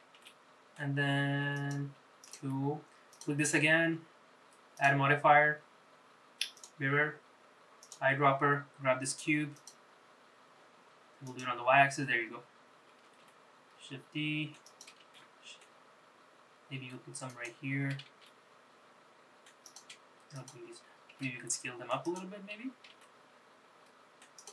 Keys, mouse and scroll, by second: 0.3 g, 2.3 click, 3.3 click, 4.9-6.9 drag, 7.9 click, 11.4 click, 13.2 shift+d, 15.2 shift+d, 18.3 shift+d, 20.5 shift+click, 21.3 s, 23.0 g.